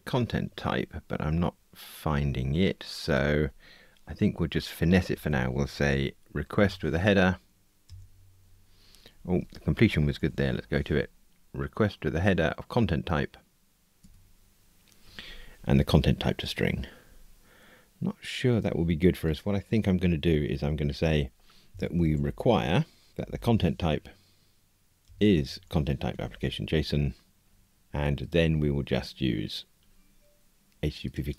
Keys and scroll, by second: 7.8 Return, 9.2 super+z, 14.0 Tab, 23.1 super+z, 25.0 Return, 26.1 Tab.